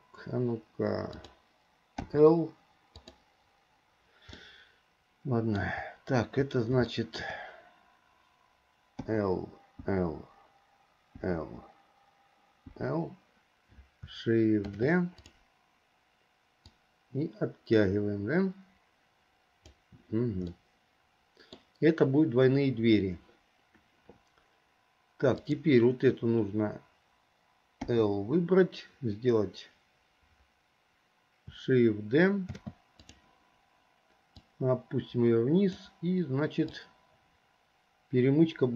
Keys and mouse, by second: 2.2 l, 3.1 click, 4.5-5.8 middle drag, 7.1 shift+middle click, 9.2 click, 10.0 click, 11.4 click, 12.9 click, 14.8 shift+d, 17.0-19.9 drag, 20.7-21.7 middle drag, 25.5 click, 28.0 l, 32.7 shift+d, 34.6-36.0 drag, 36.9-38.7 drag.